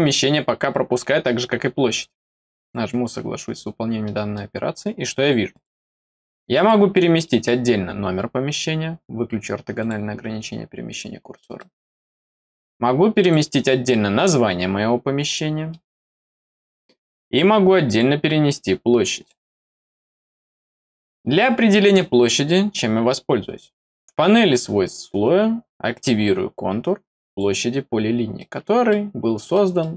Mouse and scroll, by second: 2.5 click, 3.6 middle click, 3.6 scroll down 2, 4.0 middle click, 5.4 click, 6.5 click, 7.2 middle click, 9.7 click, 10.8 click, 11.5 middle click, 12.0 middle click, 13.1 click, 13.8 middle click, 15.2 click, 15.6 middle click, 16.7 middle click, 17.8 click, 19.1 click, 20.4 click, 21.0 middle click, 21.9 middle click, 24.4 click, 27.2 click, 28.3 middle click, 29.4 middle click.